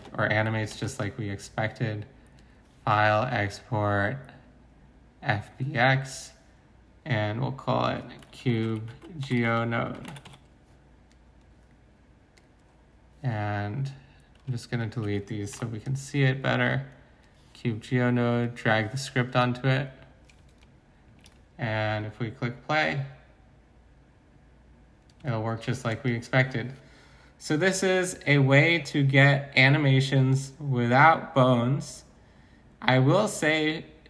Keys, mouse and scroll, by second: 8.3-10.3 typing, 15.5 Delete.